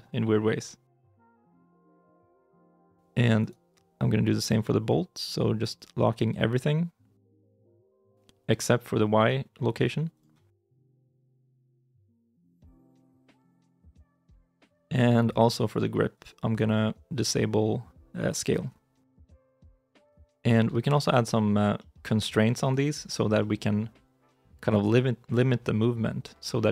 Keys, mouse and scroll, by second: 1.1 ctrl+z, 1.5 middle click, 2.0 shift+middle click, 3.2 right click, 10.6 g, 13.1 ctrl+z, 14.1 right click, 14.5 shift+middle click, 20.7 shift+middle click, 21.6 middle click, 22.5 right click, 23.2 middle click.